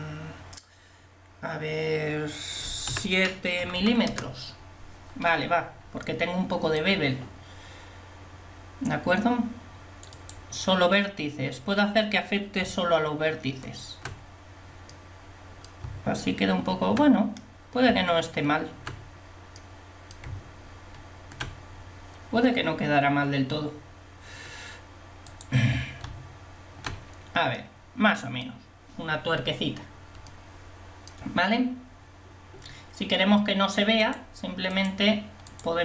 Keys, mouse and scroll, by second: 3.8 m, 10.2-11.9 drag, 12.9 Tab, 15.9 Tab, 18.0 Tab, 20.4 Tab, 25.4 click, 26.1 Tab, 34.2-35.8 drag.